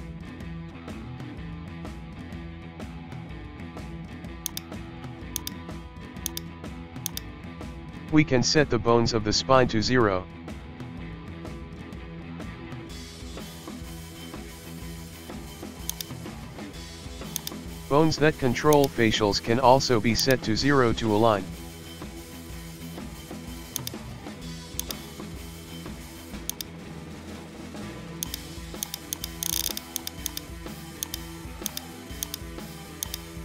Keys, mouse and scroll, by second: 1.4-2.8 scroll down 1, 2.8 shift+middle click, 3.7 scroll up 2, 4.0 shift+middle click, 4.2 scroll up 1, 4.4 click, 5.9 shift+middle click, 6.3 shift+click, 6.6 shift+middle click, 7.1 shift+click, 7.6-8.9 shift+middle drag, 8.9 KP_1, 9.9 alt+r, 10.3-10.9 scroll down 2, 10.9 shift+middle click, 11.7-13.2 scroll up 4, 12.0 shift+middle click, 12.7 shift+middle click, 13.2 shift+middle click, 13.7 scroll down 1, 13.9 shift+middle click, 14.4 Tab, 14.8 shift+middle click, 15.9 shift+click, 16.5 scroll up 1, 16.7 shift+middle click, 17.4 click, 18.2 scroll up 1, 18.3 shift+middle click, 18.7 click, 20.2 shift+right click, 20.8 Tab, 21.7 alt+r, 22.4 Tab, 22.7-23.7 scroll down 1, 23.7 click, 24.8 click, 25.4-26.5 middle drag, 26.5-26.8 drag, 26.8-28.2 middle drag, 28.2 click, 29.1 click, 30.0 right click, 30.6-31.0 shift+middle drag, 31.0 shift+click, 31.2-31.6 scroll up 2, 31.4 shift+middle click, 31.6 click, 32.0 shift+middle click, 32.2 shift+click, 32.6 scroll down 1, 32.7 shift+middle click, 33.0 shift+right click, 33.3 Tab.